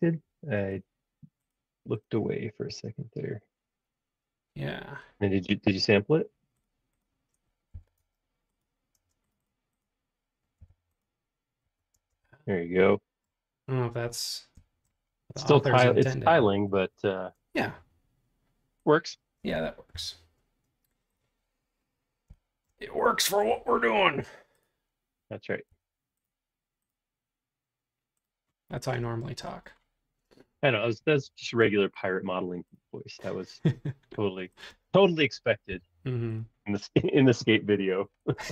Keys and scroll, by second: 7.7 b, 8.9 space, 10.7 b, 11.6 Escape, 12.0 space, 12.1 Escape, 19.9 m, 25.7 q, 30.4 space, 31.2 q, 34.7 space, 35.7 m, 38.0 Escape, 38.4 space.